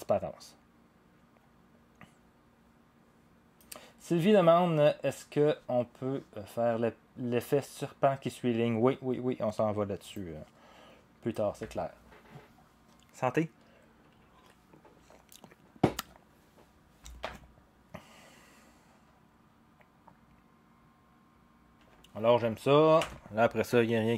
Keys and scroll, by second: 17.2 0, 22.0 0, 23.0 0.